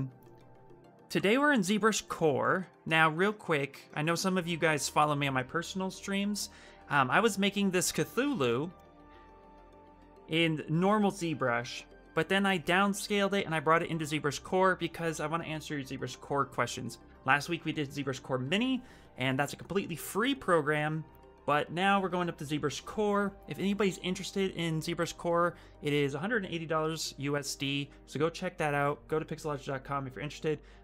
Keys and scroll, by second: 13.3 shift+f.